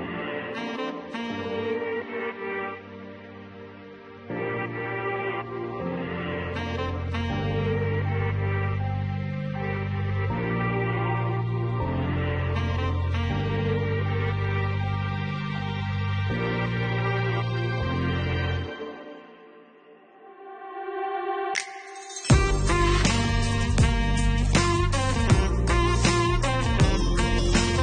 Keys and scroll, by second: 14.2 1, 14.5 5, 15.1 0, 16.2 Return, 25.1 4.